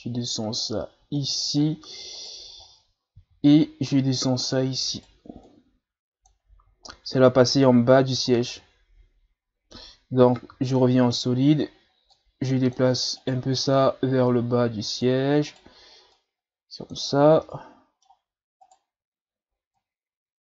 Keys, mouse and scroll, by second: 2.1 right click, 2.6-3.2 ctrl+scroll down 3, 3.2 e, 4.9 right click, 5.5-6.8 drag, 6.8-7.8 ctrl+scroll down 1, 8.3-8.6 scroll down 2, 8.6-10.4 middle drag, 10.4 z, 10.8 middle click, 11.3-11.6 scroll up 2, 12.1-13.2 drag, 13.2 right click, 13.8 click, 15.5 right click, 16.2-17.2 drag, 17.2 scroll down 1, 17.4-18.6 middle drag, 18.6 right click, 19.7-20.4 drag.